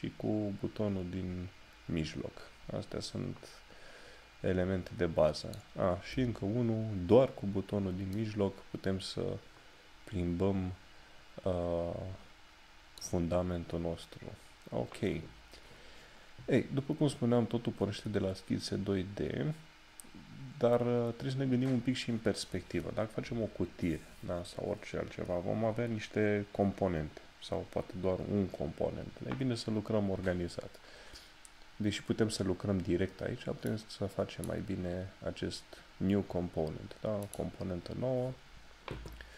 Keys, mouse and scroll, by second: 16.3 scroll down 1, 34.0 click, 37.2 click.